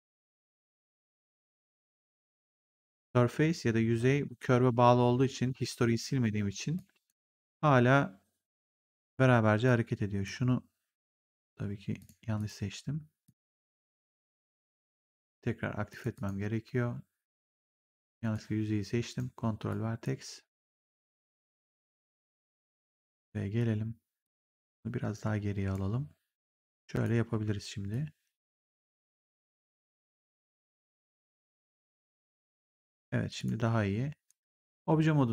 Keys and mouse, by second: 0.9 click, 6.7 click, 9.6 click, 11.9 click, 14.8 click, 17.6 click, 18.2 right click, 19.6 click, 22.7 click, 24.1 click, 26.3 click, 27.2 r, 27.8 click, 29.8 w, 33.3 click, 34.2 right click.